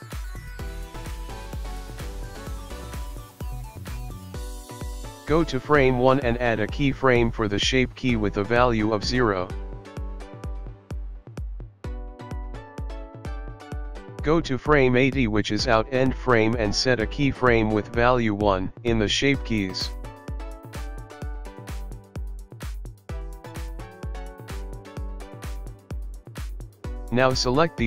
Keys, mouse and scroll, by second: 0.5 click, 2.6 click, 12.7 click, 18.1 click, 21.2 i, 23.1 click.